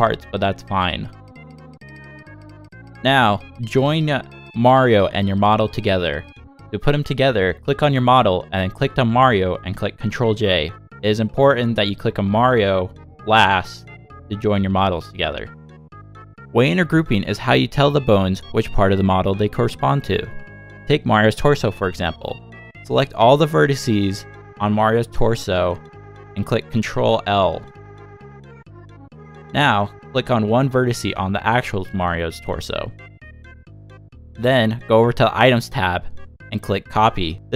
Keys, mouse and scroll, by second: 4.4 shift+middle click, 5.1 shift+click, 5.7 middle click, 9.8 ctrl+j, 11.1 Tab, 12.2 shift+middle click, 12.7 middle click, 16.3 scroll up 2, 16.9 scroll up 1, 17.0 shift+middle click, 18.1 click, 19.8 click, 21.7 l, 24.3 shift+click, 26.3 click, 27.2 l, 34.1 shift+click, 34.9 click, 36.0 click.